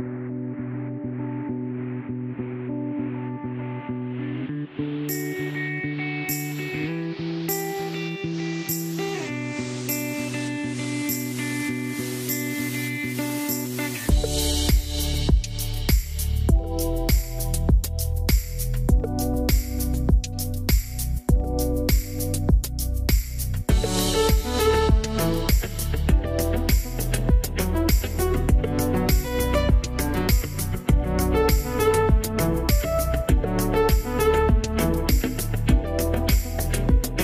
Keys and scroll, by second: 0.8-2.3 typing, 24.2 m, 31.9 5, 32.0 Return.